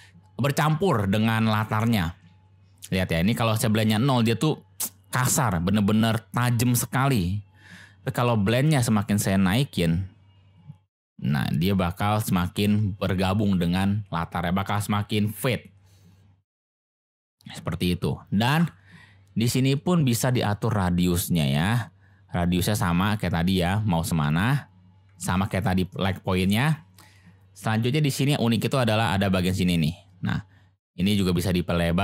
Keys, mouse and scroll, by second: 9.0-12.6 drag, 20.6-24.4 drag, 25.2 ctrl+z, 29.6-32.0 drag.